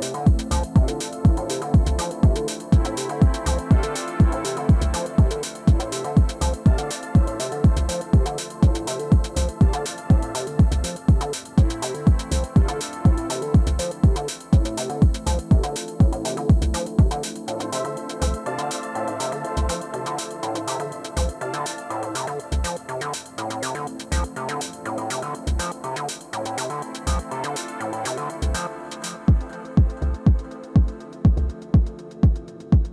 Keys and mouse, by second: 2.5 click, 3.3 middle click, 3.5-5.0 drag, 5.1 KP_3, 6.8-16.6 drag, 9.0-14.3 middle drag, 16.4-18.8 middle drag, 19.7-21.1 middle drag, 21.1-25.2 drag, 25.6-32.1 drag, 29.1 i, 31.9 middle click.